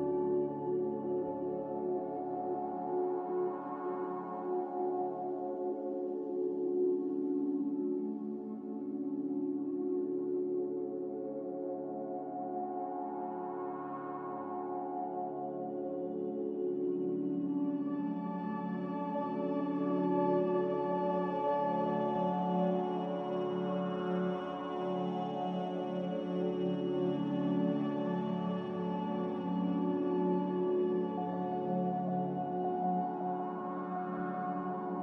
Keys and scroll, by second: 6.0 ctrl+c, 17.7 n, 18.4 n, 21.5 m, 25.5 n, 26.6 n, 31.8 a.